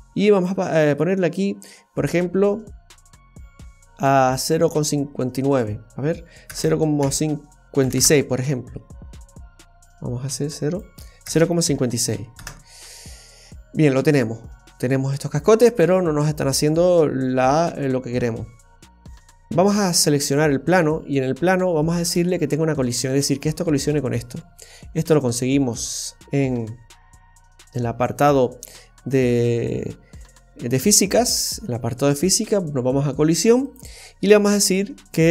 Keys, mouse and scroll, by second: 0.9 click, 6.5 KP_0, 6.6 KP_Decimal, 7.0 KP_5, 7.8 KP_6, 7.9 KP_Enter, 9.5 BackSpace, 13.7-14.2 scroll down 2, 14.1 middle click, 19.0-19.6 scroll up 2, 19.7 right click, 22.0 space, 27.1 click, 28.3-28.9 scroll down 2, 33.6 click, 34.4-35.3 scroll down 7.